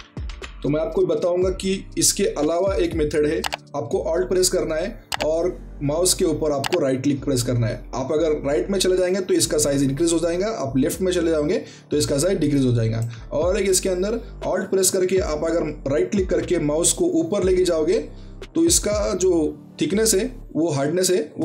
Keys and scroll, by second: 0.0-0.1 typing.